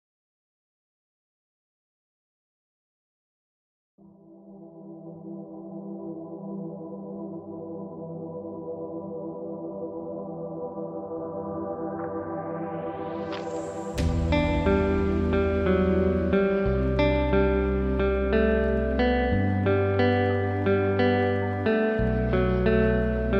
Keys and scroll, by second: 3.1 ctrl+space, 12.7 ctrl+space, 19.3 ctrl+g.